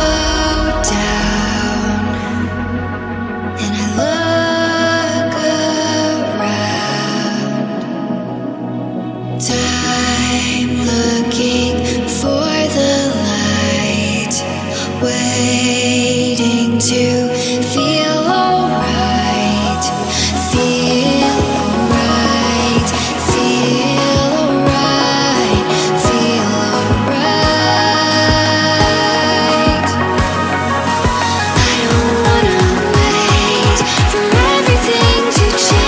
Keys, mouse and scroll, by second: 3.1 click, 4.1 ctrl+shift+click, 5.2 middle click, 6.0-7.6 drag, 8.8-16.2 drag, 16.2 middle click, 17.1-18.1 ctrl+shift+drag, 18.1-20.1 middle drag, 20.4 scroll down 2, 20.7 scroll up 4, 21.0-22.7 middle drag, 22.7-25.8 drag, 25.8-26.3 scroll down 2, 26.3-27.8 middle drag, 27.8 scroll up 3, 28.1 scroll down 2, 28.4-29.8 middle drag, 29.8 click, 30.4 g, 31.7-33.2 drag, 33.5 g, 35.6 shift+middle click.